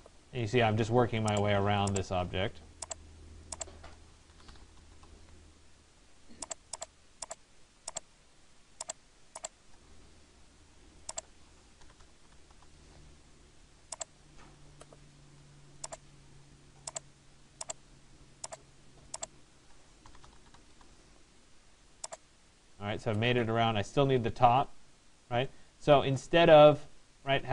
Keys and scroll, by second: 4.5 Return, 12.1 Return, 20.3 Return.